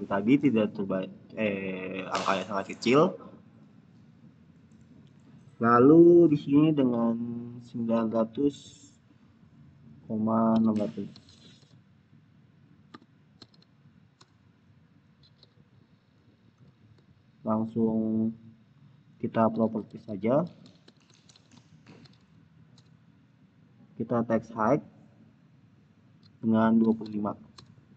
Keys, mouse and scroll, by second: 3.9 click, 7.4 click, 10.5-13.4 typing, 14.1 Return, 16.4 click, 18.1 click, 19.3-21.9 typing, 22.6 Return, 23.8-25.5 scroll down 1, 25.5 click, 26.4-27.4 typing.